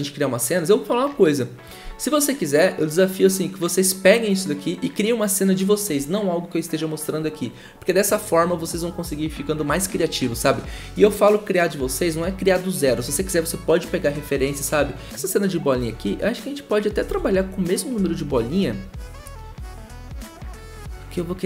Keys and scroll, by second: 17.0 ctrl+z.